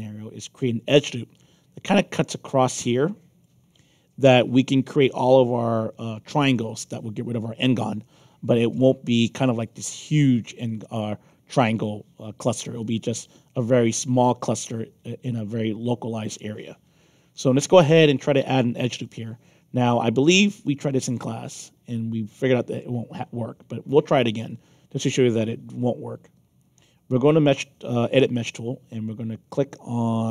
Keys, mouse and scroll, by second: 2.8 alt+click, 6.7-8.7 alt+drag, 13.9 alt+click, 15.2-18.0 alt+drag, 20.8 click.